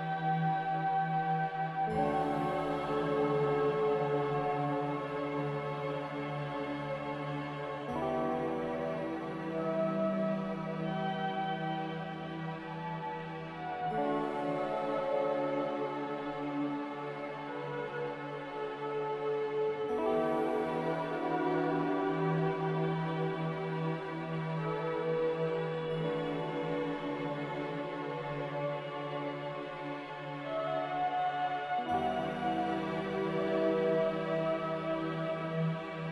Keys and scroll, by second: 0.0 z, 1.3 ctrl+c, 1.5 ctrl+v, 7.5 ctrl+c, 7.7 ctrl+v, 12.4 a, 15.4 n, 20.6 m, 27.3 7, 27.5 Return, 30.5 a.